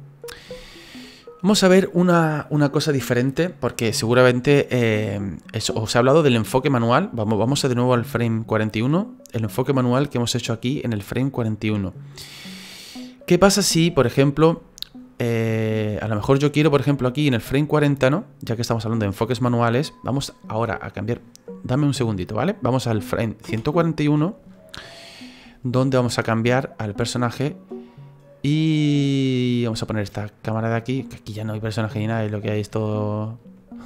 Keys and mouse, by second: 7.5 click, 9.3 click, 16.1 click, 23.4 Right, 25.7 middle click, 32.9 shift+middle click, 33.7 middle click.